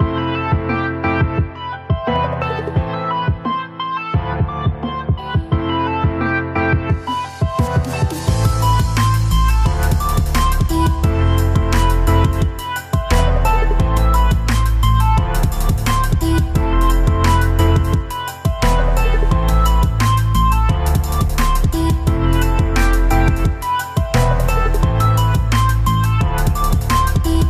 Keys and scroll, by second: 0.8 ctrl+=, 2.3 ctrl+=, 5.4 ctrl+-, 7.1 ctrl+-, 14.7 ctrl+-, 17.2 v.